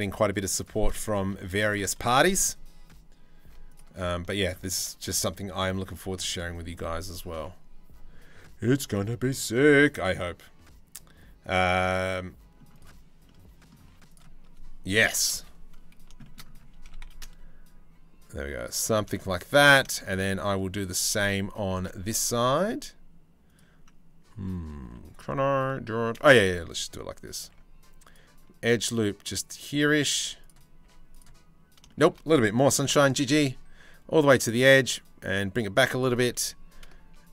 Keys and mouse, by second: 0.9 2, 1.8 shift+middle click, 3.3 alt+click, 4.0 alt+shift+click, 4.6 middle click, 5.5 z, 6.9 1, 8.2 c, 12.8 click, 13.4 z, 14.6 KP_3, 14.9 KP_1, 15.7 shift+middle click, 16.4 s, 16.9-18.4 shift+middle drag, 18.7 shift+middle click, 20.1 z, 22.0 ctrl+r, 24.4 z, 27.2 ctrl+r, 29.7 z, 30.4 z, 32.2 click, 32.5 g, 36.0 2.